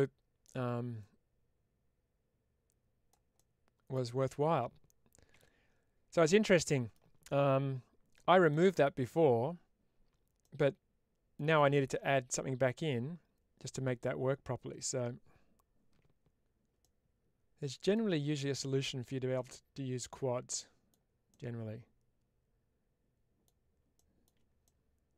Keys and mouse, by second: 0.9-3.0 drag, 3.2 middle click, 6.4-6.8 middle drag, 8.4 middle drag, 10.3-11.2 middle drag, 16.7-17.8 middle drag, 18.3-20.8 middle drag, 21.3-23.3 middle drag, 24.5 middle click.